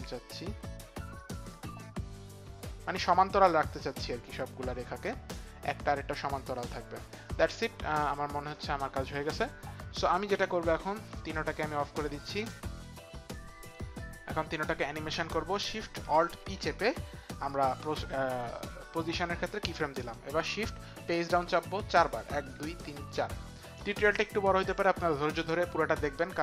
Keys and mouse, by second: 11.1 click, 12.5 shift+click, 13.6 click, 16.3 alt+shift+p, 22.2 shift+Page_Down, 22.5 shift+Page_Down, 22.8 shift+Page_Down, 23.1 shift+Page_Down.